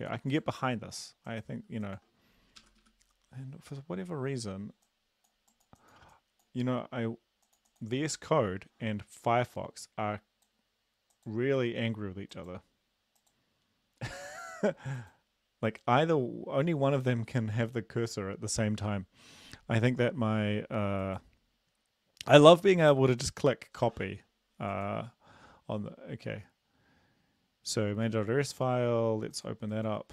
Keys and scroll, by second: 2.6 Up, 2.8 Up.